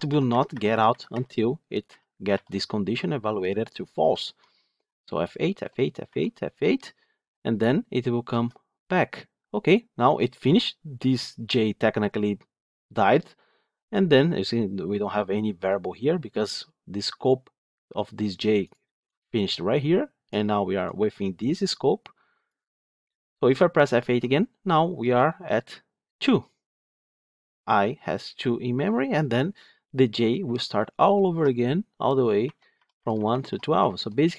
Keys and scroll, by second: 24.0 F8, 29.0 F8.